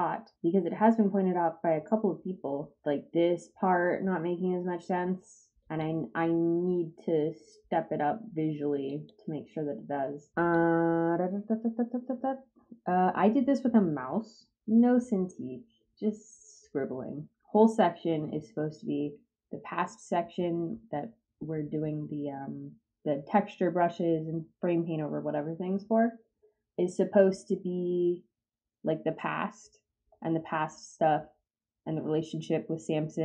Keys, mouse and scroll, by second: 5.6 click, 8.8 click, 10.5-17.3 drag.